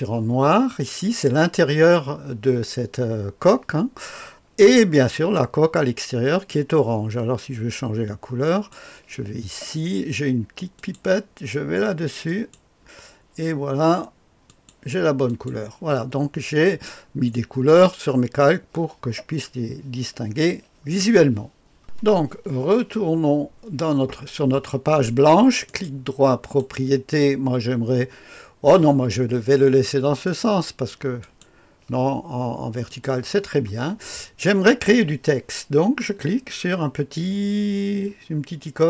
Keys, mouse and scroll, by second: 5.1 click, 8.4-9.4 drag, 10.8 click, 12.3 click, 14.6-16.7 drag, 21.8 click, 25.6 click, 26.4 click, 30.2 click, 31.2 click, 33.0 click.